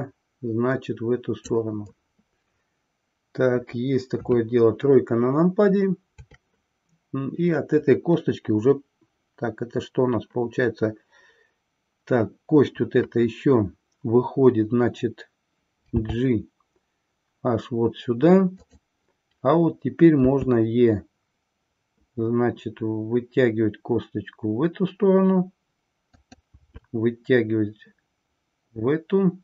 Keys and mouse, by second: 4.1 KP_3.